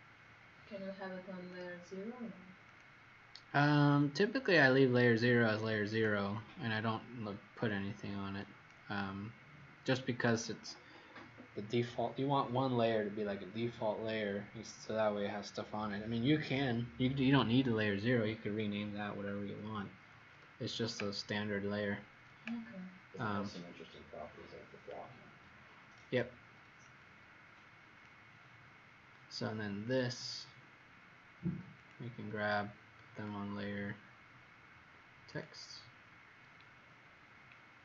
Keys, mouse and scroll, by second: 1.5 click, 36.7-37.1 scroll down 3.